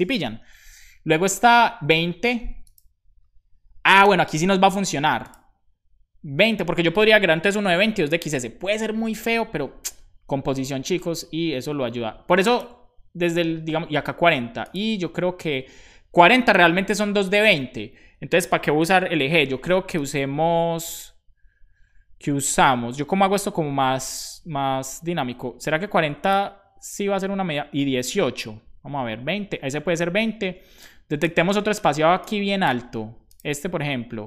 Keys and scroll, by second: 3.7-4.5 typing, 16.7 Right, 16.9 Right, 18.4 Down, 18.7 Left.